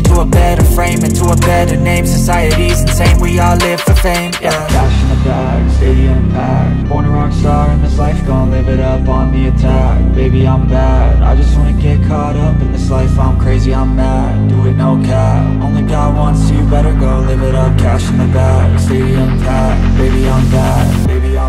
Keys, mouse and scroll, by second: 0.6 scroll up 1, 0.8-1.1 scroll down 1, 1.8 alt+middle click, 4.4 alt+click, 5.4 alt+click, 6.1 alt+click, 6.3-8.9 scroll up 1, 10.0-10.5 scroll down 1, 12.3-12.6 scroll up 1, 12.6-13.3 scroll down 1, 13.7 shift+click, 14.2 shift+click, 16.0-16.9 typing, 18.0 alt+click, 19.8 alt+click, 21.2 alt+click.